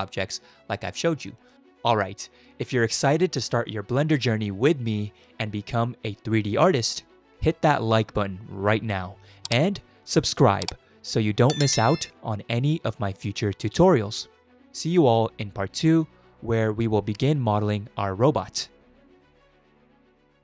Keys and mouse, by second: 0.8 middle click, 1.5 shift+middle click, 17.2 Tab.